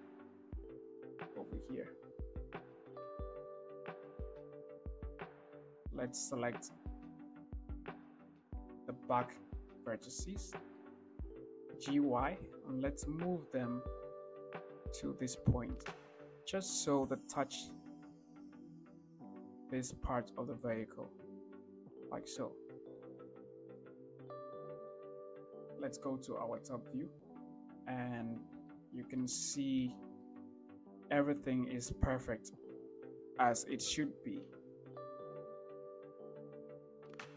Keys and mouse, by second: 0.0 shift+click, 0.6 shift+middle click, 2.2 g, 2.3 y, 3.9 shift+middle click, 4.9 shift+middle click, 7.6 click, 9.4 shift+middle click, 10.4 shift+middle click, 11.3 g, 11.5 y, 15.8 middle click, 16.3 shift+click, 18.0 g, 18.3 y, 21.7 shift+click, 22.7 shift+click, 23.5 shift+click, 24.4 shift+click, 26.2 KP_7, 28.3 shift+click, 29.5 shift+click, 34.1 KP_3, 35.7 KP_1.